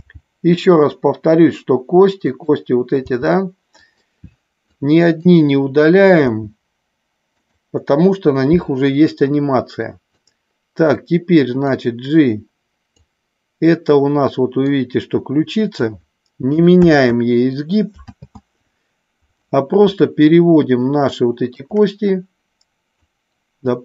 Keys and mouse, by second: 2.3 click, 3.0 g, 3.8 click, 4.5 click, 6.3 g, 7.4 click, 10.3 click, 11.6-13.0 drag, 14.7-15.8 drag, 16.8 ctrl+z, 18.0 ctrl+z, 20.1-21.7 shift+drag, 23.2-23.8 drag.